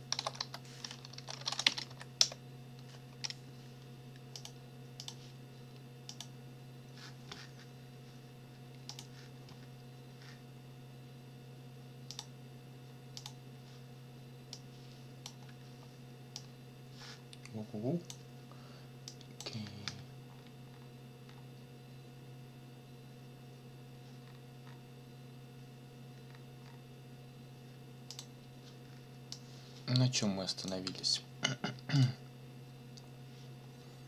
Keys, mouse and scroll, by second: 0.0-2.4 typing, 4.3 click, 5.0 click, 6.1 click, 8.9 click, 12.1 click, 13.2 click, 14.5 click, 16.4-18.3 drag, 19.1 click, 20.3-21.5 scroll down 3, 24.2-24.7 scroll up 2, 24.7 scroll down 2, 26.2-26.9 scroll down 4, 28.1 click, 29.3-30.8 drag, 31.9 click.